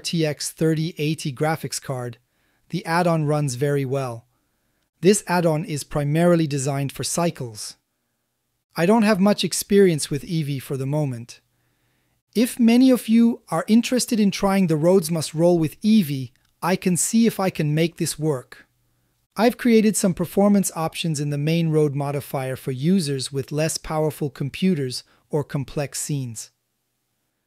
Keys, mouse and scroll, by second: 0.5-2.4 middle drag, 2.8-3.3 shift+middle drag, 3.5-4.4 middle drag, 4.8-5.3 shift+middle drag, 6.0 shift+middle click, 6.5 z, 9.1-10.6 ctrl+middle drag, 11.0-11.5 shift+middle drag, 11.8 middle click, 12.9-14.0 shift+middle drag, 14.7-16.3 ctrl+middle drag, 16.6-18.6 middle drag, 19.5 a, 19.7 a, 20.2 click, 20.3 middle click, 20.5 click, 20.8 middle click, 21.4-21.8 shift+middle drag, 22.5-23.5 ctrl+drag, 23.5-24.7 ctrl+middle drag, 24.7 ctrl+click, 25.1 ctrl+middle click, 27.3 shift+middle click.